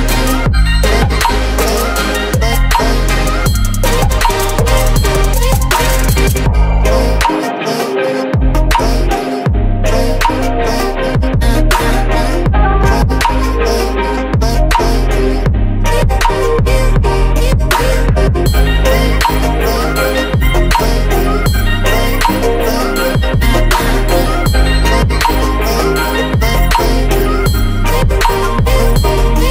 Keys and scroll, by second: 14.8 Return, 17.3-20.0 typing, 21.6-22.8 typing, 27.4 Return.